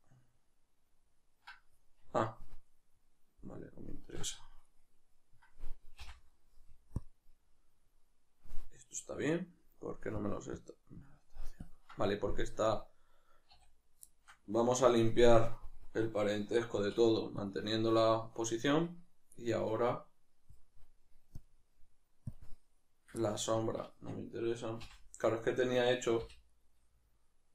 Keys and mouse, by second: 4.6 right click, 7.0-14.1 drag, 13.5 a, 14.1-27.5 shift+middle drag, 16.7 alt+p, 24.8 n.